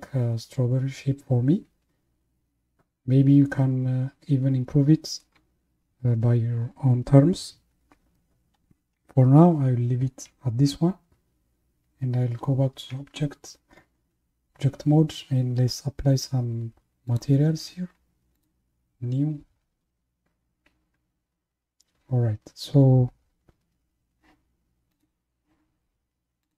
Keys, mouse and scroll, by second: 11.1 Tab, 17.1 click, 18.4-21.5 drag, 25.0 click, 26.4 click.